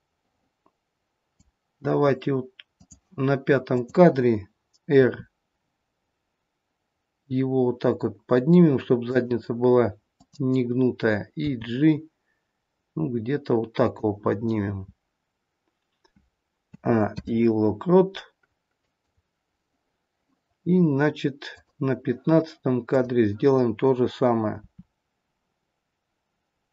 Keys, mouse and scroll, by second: 2.8 click, 3.7 click, 4.9 r, 10.1 click, 11.5 g, 16.6 a, 17.1 i, 21.6 click, 22.9 click, 24.6 r.